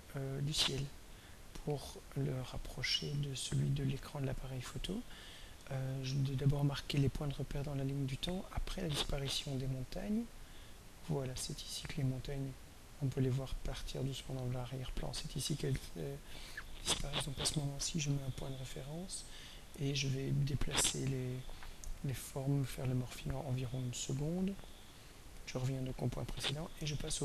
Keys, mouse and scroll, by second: 1.1 click, 2.8 scroll down 1, 7.6-15.1 drag, 16.2 click, 17.4 click, 20.7 click, 22.7 click, 26.2 click.